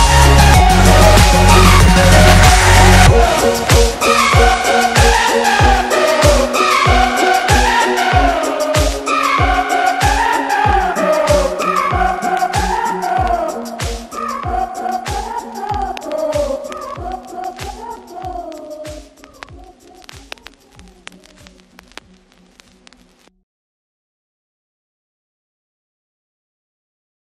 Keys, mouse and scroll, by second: 0.5 ctrl+z, 3.1 right click, 4.3-6.3 drag, 6.5 Left, 6.8 Down, 8.4-10.5 alt+drag, 10.9 Right, 14.5 click, 14.9 Left, 17.3 click, 17.9 space, 18.0 click, 18.2 space, 19.0 click, 19.2 Up, 19.6 Right, 21.2 Up, 21.6 Right, 23.2 click, 23.4 Up, 24.5 click, 24.7-25.8 space, 26.2 click, 26.9-27.2 alt+drag.